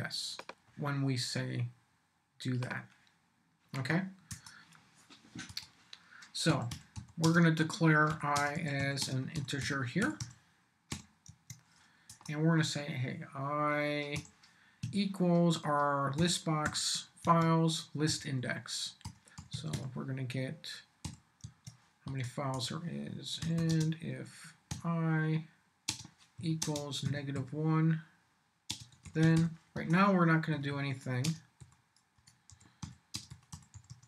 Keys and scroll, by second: 4.3 Return, 5.5 Return, 6.2-10.9 typing, 11.2 Tab, 12.1 Return, 14.1 i, 14.8 =, 16.2 |, 16.6 b, 17.2 Tab, 18.0-21.0 typing, 21.4 Tab, 22.0 Return, 23.2-24.7 typing, 25.9-27.3 typing, 28.7-34.0 typing.